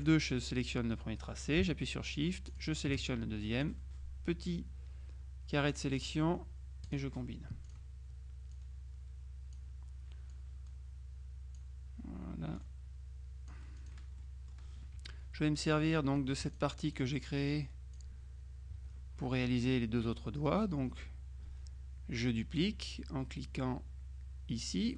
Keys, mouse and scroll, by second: 0.1 click, 2.6 shift+click, 3.7-6.6 drag, 7.0 click, 7.8 click, 8.6-10.1 drag, 10.4-12.2 drag, 12.6-14.4 drag, 14.3 right click, 15.0 F1, 16.4 F2, 16.6 click, 18.8 F1.